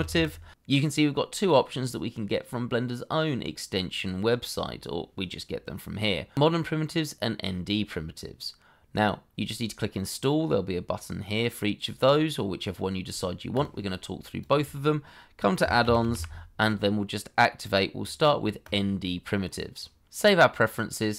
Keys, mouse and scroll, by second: 0.0 i, 0.1 m, 13.5 double click, 15.6 p, 15.8 r, 16.0 i, 16.1 m.